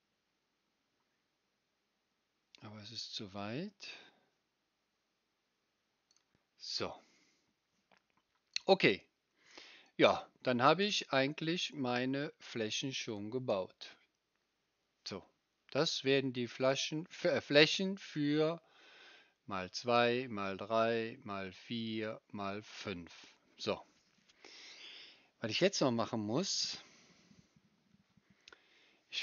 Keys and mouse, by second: 6.2-9.8 right drag, 9.8-29.2 middle drag.